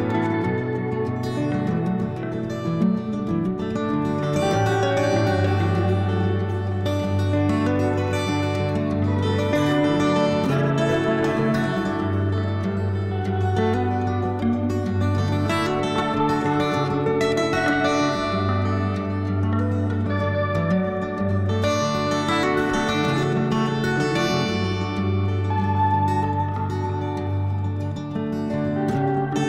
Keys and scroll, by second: 7.5 3, 9.3 4, 14.4 4, 17.9 s, 21.0 2, 21.3 s, 26.0 s.